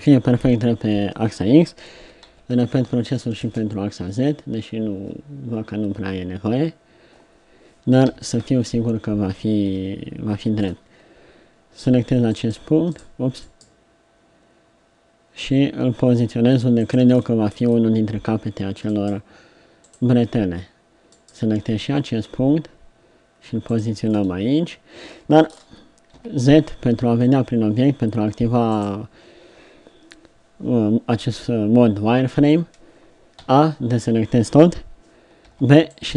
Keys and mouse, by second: 1.9 s, 4.9 KP_7, 8.1 KP_3, 8.4 KP_1, 9.7 KP_7, 13.6-15.4 drag, 17.3-22.0 drag, 26.1 z, 33.4 a, 35.4 b.